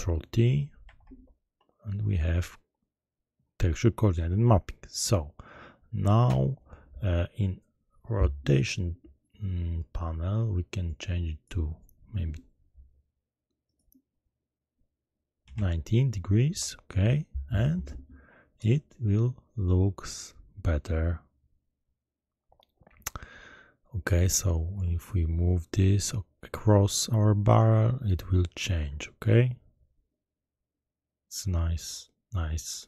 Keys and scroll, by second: 0.8 ctrl+t, 15.4 9, 15.5 0, 16.4 Return.